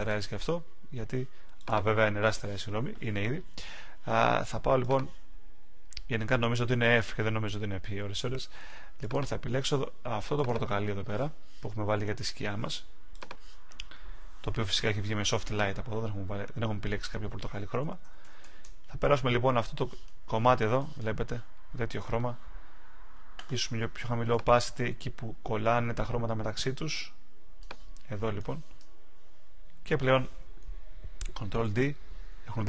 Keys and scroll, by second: 31.6 super+d.